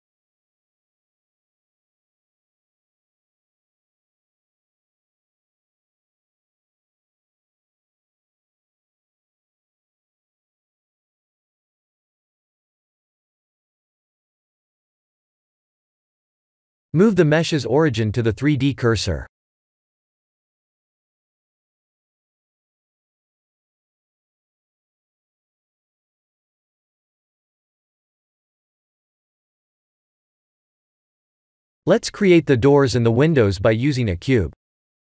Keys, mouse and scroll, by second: 0.1 click, 0.8 middle click, 0.9 middle click, 1.5 click, 2.3-3.1 scroll up 2, 3.1 scroll up 1, 3.3 KP_1, 4.1 scroll up 2, 7.5 click, 9.9 Tab, 11.6 Tab, 12.5-14.6 scroll down 4, 18.9 click, 22.2-23.2 scroll up 5, 23.2 scroll down 1, 23.3-24.9 scroll down 5, 24.9 click, 24.9 scroll down 1, 25.7 middle click, 25.8 middle click, 26.0 middle click, 28.4 click, 32.8 shift+a.